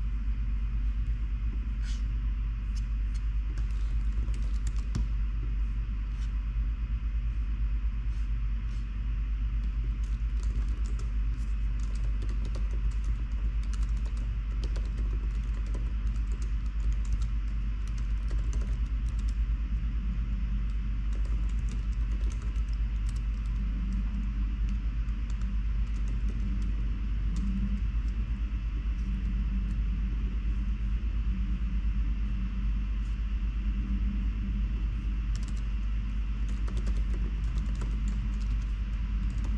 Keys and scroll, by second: 4.0 super+p, 4.0-5.1 typing, 9.0 typing, 10.3-23.2 typing, 16.5 Tab, 35.5 Return, 35.6 Return, 36.3-39.5 typing.